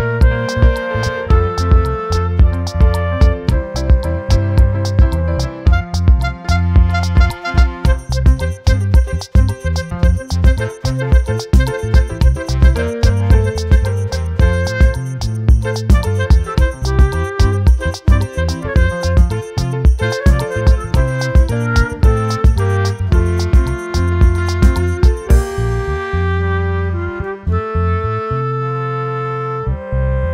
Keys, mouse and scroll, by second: 0.7 click, 5.5 click, 8.0 click, 9.4 click, 10.6 click, 11.9 click, 13.8 click, 14.6 right click, 15.9-17.8 drag, 20.1 click, 22.0 click, 23.2-24.3 shift+right drag, 24.7-25.1 right drag, 25.6-26.4 drag, 27.2 click, 29.5-30.3 drag.